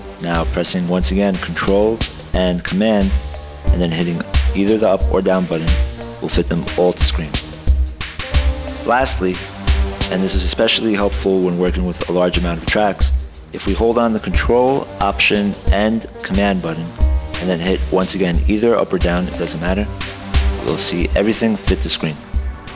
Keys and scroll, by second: 6.0 ctrl+super+Down, 20.5 ctrl+alt+super+Down.